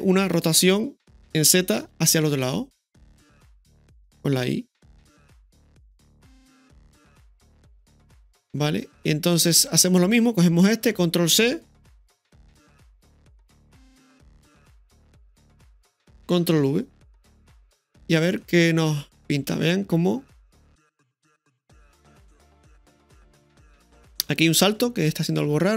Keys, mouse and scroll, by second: 1.1 r, 10.8 right click, 12.3-14.9 typing, 13.5 right click, 15.4 click, 16.3-17.1 typing, 18.0 click, 18.2 space, 21.2-21.5 scroll down 1, 21.6-22.1 middle drag, 24.2 space, 25.1-25.7 drag.